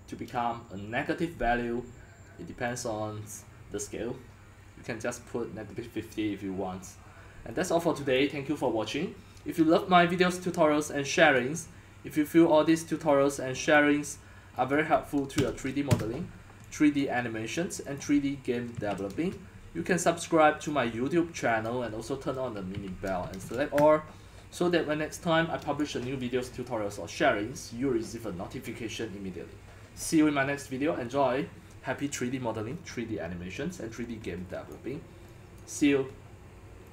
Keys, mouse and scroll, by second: 3.4-7.5 drag, 8.1-8.7 drag, 9.1-11.9 drag, 12.8 click, 14.7 click, 15.4-16.9 typing, 17.1-18.2 drag, 18.5-20.5 typing, 20.7 click, 21.9 click, 23.0-24.2 typing, 25.8-30.9 drag, 34.7 click, 35.6 click.